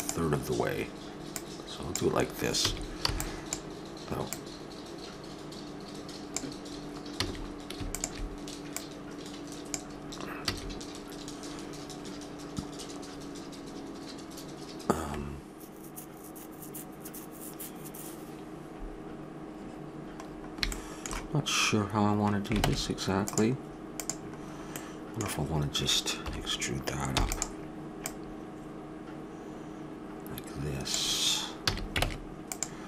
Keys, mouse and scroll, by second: 0.4 middle click, 1.3-3.3 drag, 2.6 a, 3.1 b, 4.3-6.2 drag, 7.2 a, 7.9-11.7 drag, 10.4 a, 20.2-22.4 middle drag, 22.6 ctrl+Tab, 23.9 click, 26.2 KP_7, 27.1 e, 28.0-29.9 drag, 31.6 a, 32.0 ctrl+Tab.